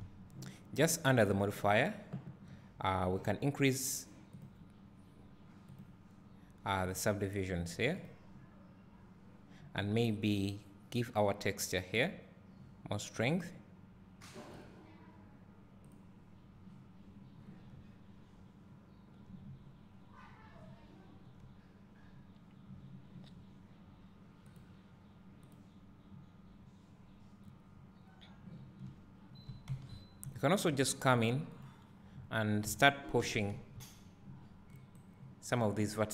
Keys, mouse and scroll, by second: 0.1 s, 4.5 click, 7.9-9.7 drag, 15.6 click, 18.3 `, 20.0-21.8 scroll up 1, 22.6-24.4 scroll down 1, 25.3-30.5 drag, 30.5 scroll down 1, 31.7 click, 33.6 g, 35.7 scroll down 1.